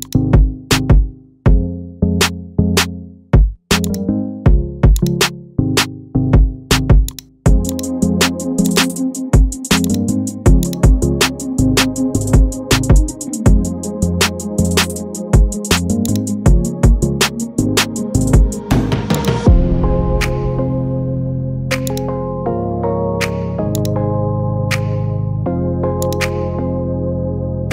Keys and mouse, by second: 0.0 shift+click, 5.1-6.6 drag, 7.8 click, 9.9 click, 16.1 alt+click, 19.2 click, 20.7-21.1 shift+middle drag, 22.4 middle click, 23.8 click, 27.6 shift+middle click.